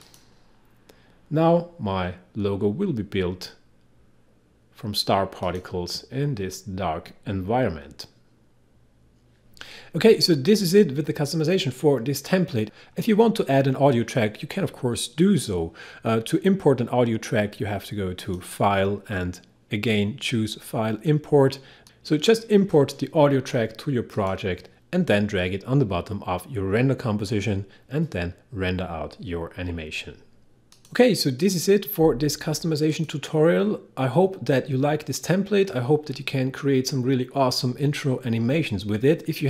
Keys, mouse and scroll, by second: 0.1 click, 5.4 click, 18.2 click, 21.8 click, 24.2 click, 30.8 click.